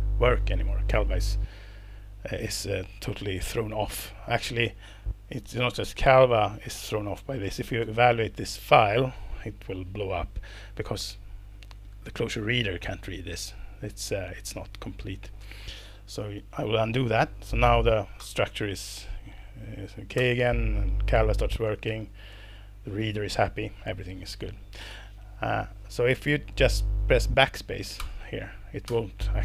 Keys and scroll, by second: 3.9 Up, 4.1 Up, 4.2 Up, 7.8 ctrl+alt+c, 8.7 Return, 16.4 super+z, 18.2 alt+Return, 20.2 alt+Return, 21.9 ctrl+alt+c, 22.3 Return, 24.9 Escape, 28.0 BackSpace, 28.9 BackSpace.